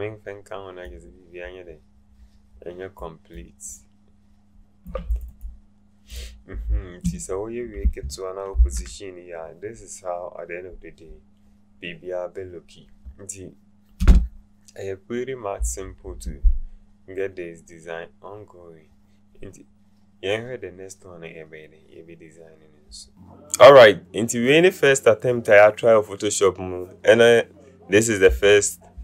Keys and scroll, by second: 8.5 ctrl+alt+0.